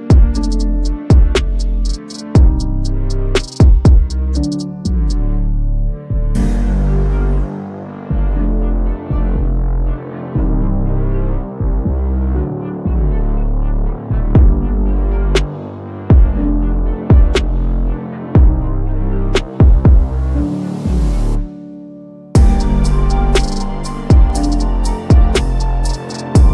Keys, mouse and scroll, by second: 2.5 click, 4.6 click, 4.7 ctrl+z, 6.6 click, 9.2-10.7 drag, 13.5 click, 17.1 click, 19.4-19.9 click, 21.0-23.3 click, 22.8 shift+click, 24.4-24.9 drag.